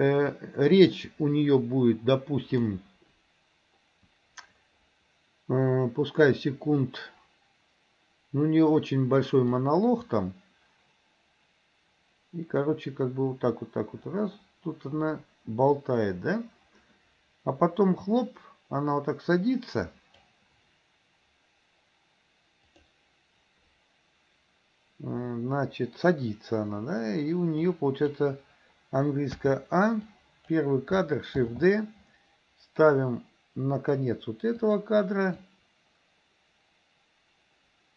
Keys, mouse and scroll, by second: 0.4-2.8 drag, 9.7-20.4 drag, 22.7 click, 27.6-28.2 drag, 29.4 a, 30.2 click, 31.6 shift+d, 35.5-37.9 drag.